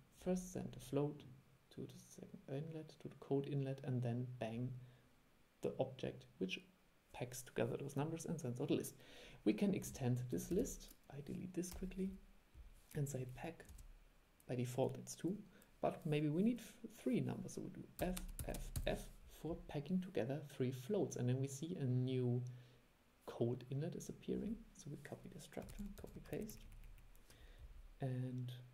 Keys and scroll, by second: 10.6 super+e, 25.8 super+c, 26.1 super+v.